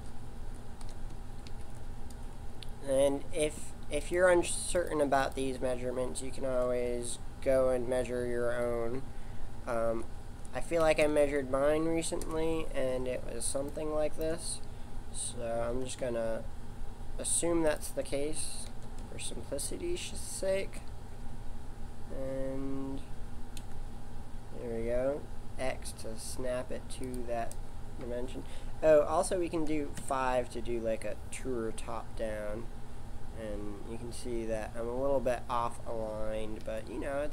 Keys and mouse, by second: 4.0-7.0 drag, 13.2-15.7 middle drag, 15.7 r, 18.7 g, 30.0 KP_5, 36.6 s.